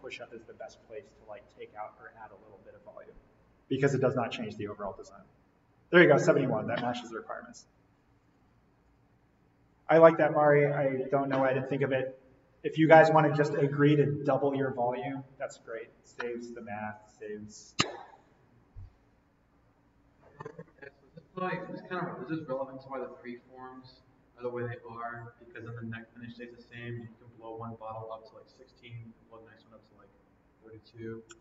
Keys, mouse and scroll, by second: 8.2 click.